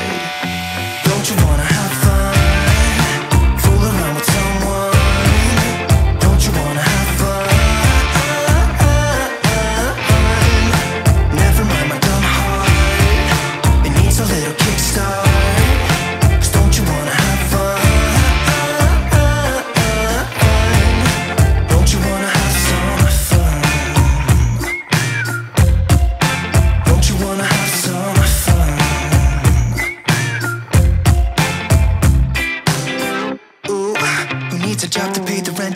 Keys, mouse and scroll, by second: 4.4 click, 4.5 click, 7.0 ctrl+s, 8.3 right click, 12.0 click, 26.6 click, 27.0 Return, 28.8 click.